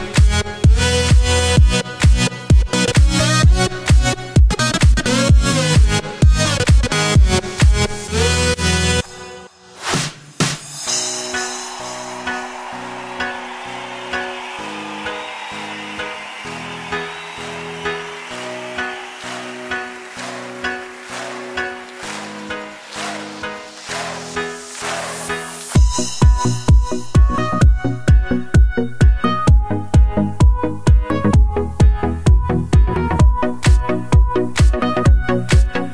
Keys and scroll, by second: 4.0-7.4 typing, 17.6 ctrl+w, 20.8 ctrl+w, 35.1-35.9 typing.